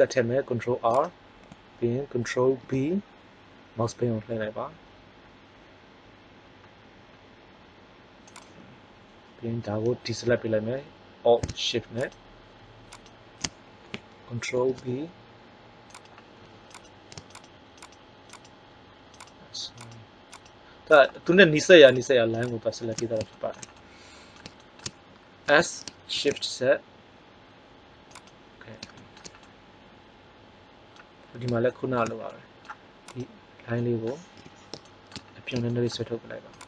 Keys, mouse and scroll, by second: 2.4 ctrl+b, 8.4 click, 14.4 ctrl+b, 25.4 s, 33.1 right click, 34.3 KP_3, 36.4 click.